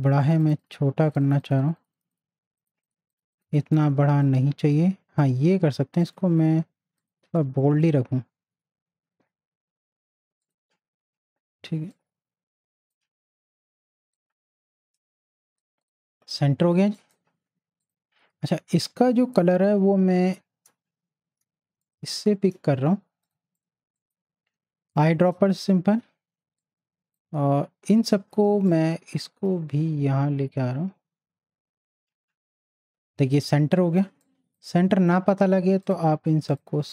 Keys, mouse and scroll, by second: 0.2 click, 10.4-15.8 drag, 19.5 i, 21.8 shift+click, 23.2 click, 24.5 space, 24.9 click, 25.0 space, 26.6-28.6 drag, 28.7-33.6 drag, 33.6 space, 33.7-35.8 drag.